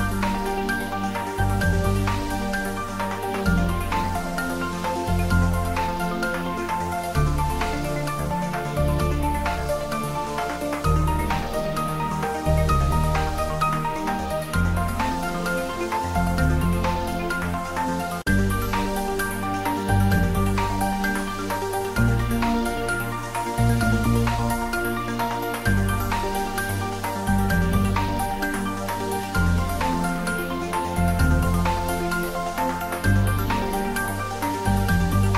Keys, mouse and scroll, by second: 0.3-1.7 ctrl+middle drag, 1.7 click, 2.0 ctrl+middle click, 2.7 ctrl+middle click, 3.3-5.2 middle drag, 5.2 click, 6.5-8.8 typing, 6.9 click, 7.9 click, 8.8 click, 10.3 r, 10.6 click, 11.8-12.7 typing, 13.8 click, 15.1-17.6 typing, 16.1 click, 18.7 click, 19.8 r, 20.4 click, 20.8 g, 22.7 click, 23.1-24.3 ctrl+middle drag, 24.3 click, 25.0 s, 26.4 y, 27.0 click, 27.3 g, 28.3 click, 28.6-30.5 typing, 29.4 click, 31.7 click, 31.8-35.3 typing, 33.3 click, 35.1 click.